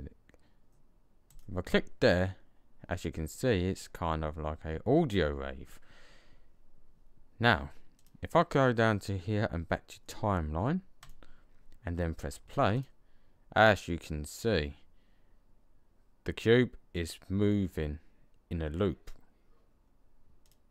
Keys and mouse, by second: 7.8 click, 8.5-9.8 middle drag, 12.6 click, 20.3-20.7 drag.